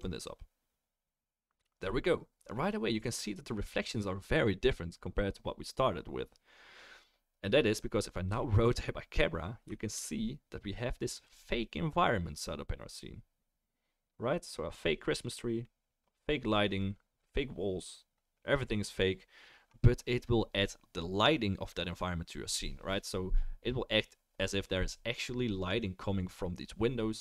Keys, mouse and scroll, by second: 0.0 click, 2.1-26.0 middle drag.